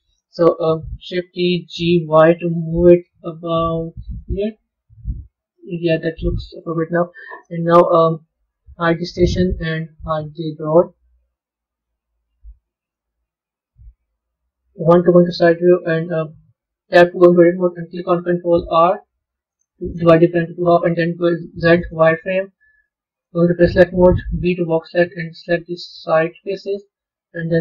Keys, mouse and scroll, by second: 1.3 shift+d, 4.4-7.4 middle drag, 8.8 drag, 10.6 click, 11.1-11.8 scroll up 3, 11.8-12.8 middle drag, 12.8-14.0 scroll up 2, 14.5 KP_1, 15.2-16.5 scroll up 6, 16.5 b, 19.1 ctrl+r, 23.1 click.